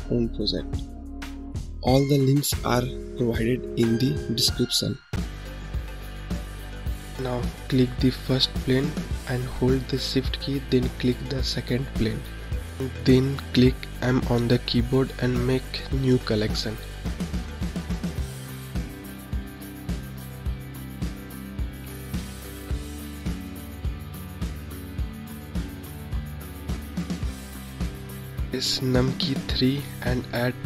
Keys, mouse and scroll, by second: 1.1-4.1 drag, 4.1-6.7 scroll down 2, 6.7 click, 8.3 shift+click, 12.4 m, 29.9 KP_3, 30.0 shift+a.